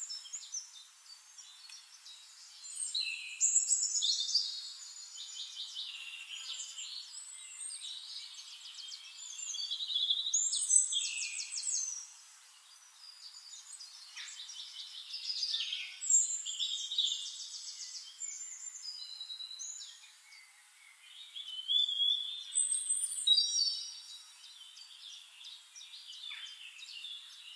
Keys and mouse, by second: 1.6 click, 3.9 shift+click, 5.2 click, 6.9-8.9 drag, 9.0-12.1 drag, 12.4 click, 15.1 click, 16.3-19.5 drag, 19.8-22.0 drag, 22.2 click, 23.6-26.2 drag, 24.4-26.2 middle drag, 24.4-26.2 right drag, 26.3-27.5 drag.